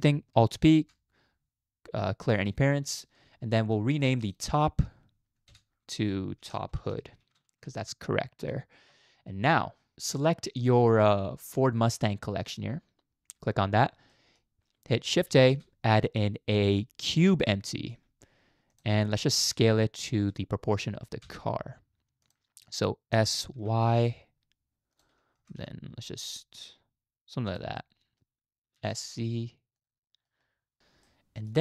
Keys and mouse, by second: 0.6 alt+p, 3.8 middle drag, 4.3-5.5 drag, 5.5 F2, 7.7 o, 12.5 click, 14.1 middle click, 15.3 shift+a, 17.5-17.9 middle drag, 19.2 shift+middle click, 20.2 g, 23.1 s, 25.4 g, 27.8-28.2 middle drag, 28.8 s, 30.1 middle click, 31.1-31.5 middle drag.